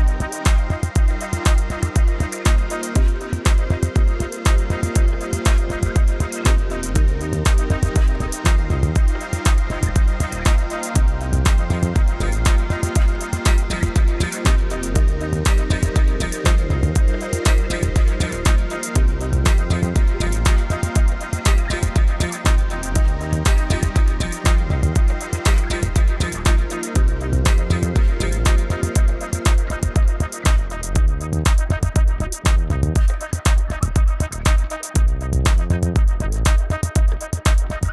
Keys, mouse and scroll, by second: 0.3 space, 0.5 click, 1.7 click, 4.8 click, 9.2 Return, 10.3 click, 14.7 Return, 15.8 click, 16.5 KP_2, 16.7 Tab, 17.3 Tab, 17.6 KP_5, 17.7 Tab, 18.7 click, 19.4 KP_2, 19.5 Tab, 20.2 Return, 21.4 click, 22.1 click, 23.1 Return, 23.3 Right, 24.1 click, 25.8 i, 26.9 click, 30.2 click, 31.0 BackSpace, 32.7 Up, 33.9-34.3 scroll up 1, 34.3 click.